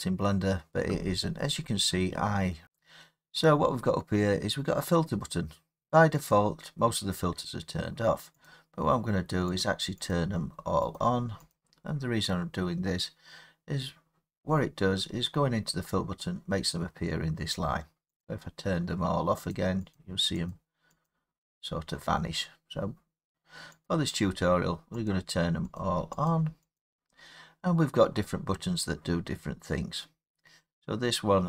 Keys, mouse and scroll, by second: 6.3-8.4 drag, 9.6 click, 10.1 click, 10.9 click, 11.5 click, 18.2 click, 19.5 click, 19.9 click, 20.5 click, 21.0 click, 23.8 click, 25.1 click, 25.7 click, 26.2 click, 26.7 click.